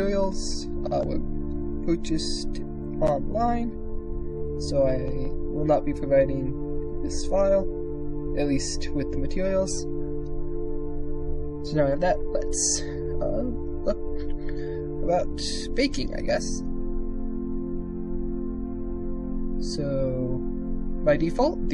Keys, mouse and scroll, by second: 0.6 shift+click, 2.9 shift+middle click, 5.9 click, 7.1 KP_0, 15.8 click, 16.3 z.